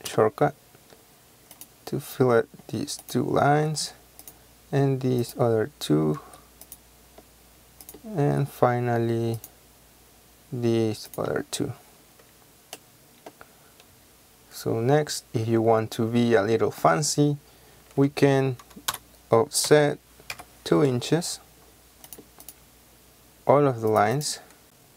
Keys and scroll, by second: 0.0 space, 3.6 space, 19.0 o, 19.8 Return, 20.4 KP_2, 20.9 Return.